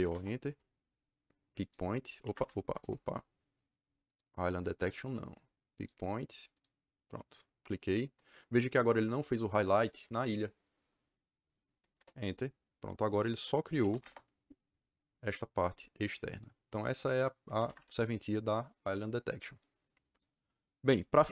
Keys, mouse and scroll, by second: 0.0-0.5 typing, 1.5 click, 2.1 Escape, 2.3 Escape, 2.7 Return, 4.0 click, 4.9 click, 5.7 click, 6.5 click, 11.9 KP_Enter, 13.1 click, 13.5-14.4 typing, 15.1 click, 17.0 click, 17.4 Escape, 17.6 Escape.